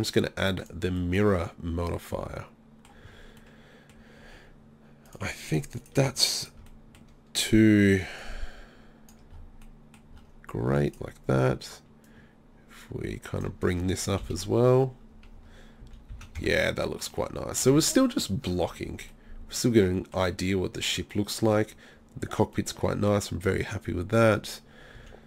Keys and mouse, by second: 3.7 middle click, 5.1 click, 6.7-8.8 middle drag, 8.8-10.9 drag, 10.9-12.1 middle drag, 13.5 click, 14.3 KP_3, 15.8 z, 16.1 z, 16.4 Tab, 25.0 z.